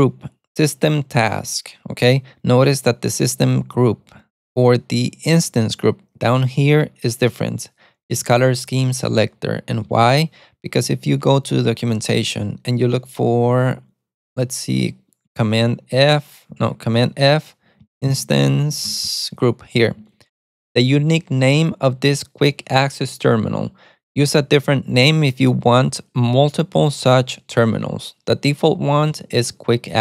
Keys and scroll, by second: 3.7-6.0 typing, 12.2 super+t, 13.5 shift+super+[, 15.8 alt+f, 16.9 super+f, 17.4-19.3 typing.